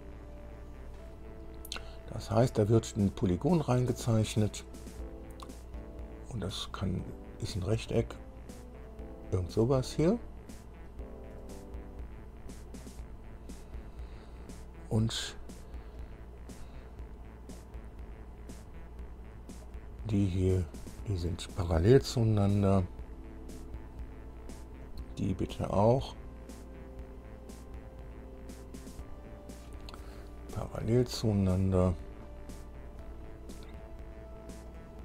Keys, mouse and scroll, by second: 6.7 click, 7.8 click, 9.1 click, 9.9 click, 11.6 click, 13.0 click, 14.0 right click, 15.8 scroll up 1, 16.2 right click, 17.8 click, 18.8 click, 19.8 click, 20.9 click, 23.8 click, 25.0 click, 26.1 click, 27.8 click, 29.4 click, 30.8 p, 34.9 click.